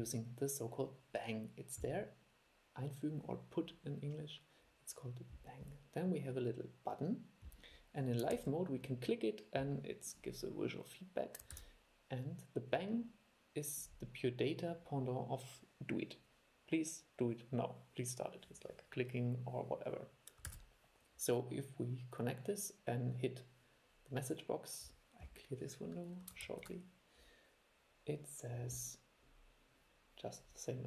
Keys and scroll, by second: 8.5 super+e, 11.7 super+e, 20.6 super+e, 26.6 shift+super+l.